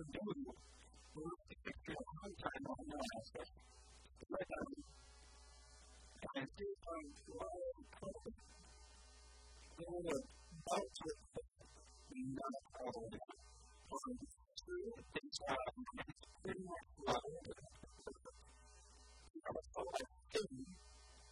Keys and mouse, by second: 0.5 b, 1.8 e, 3.8 s, 4.3 r, 4.8 g, 6.0 s, 6.8 g, 7.4 s, 8.8 shift+click, 13.9 shift+g, 15.0-16.6 drag, 16.7 g, 19.4-21.2 drag, 21.2 middle click.